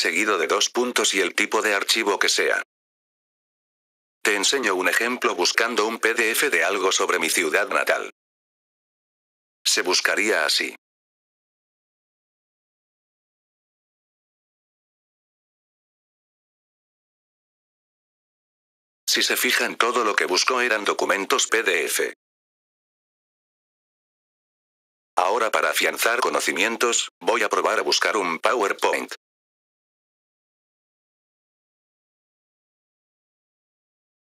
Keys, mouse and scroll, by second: 0.0-0.2 typing, 3.0 click, 5.5 click, 6.2-7.6 drag, 8.4-8.9 scroll down 5, 9.4 scroll down 3, 10.3-11.0 scroll down 8, 11.6-12.0 scroll down 2, 12.5 scroll down 3, 13.5 scroll down 3, 14.2 scroll down 1, 15.3-15.9 scroll down 3, 18.6 F4, 19.0 click, 24.3 F4, 25.0 click, 27.1 click, 27.8 click, 29.8 p, 32.2 F4.